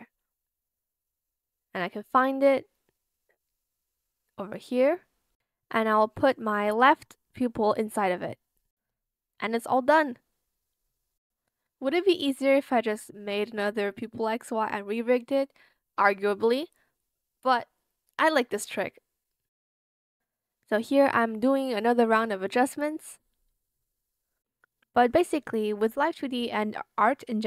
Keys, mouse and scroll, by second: 16.0 ctrl+z, 16.4 ctrl+z, 16.6 shift+click, 17.7 shift+click, 18.1 ctrl+z, 19.1 shift+click, 19.4 ctrl+z, 20.2 shift+click, 20.8 shift+click, 21.4 shift+click, 22.3 shift+click, 23.8 shift+click, 25.2 shift+click, 25.9 shift+click, 26.4 ctrl+z, 26.6 shift+click.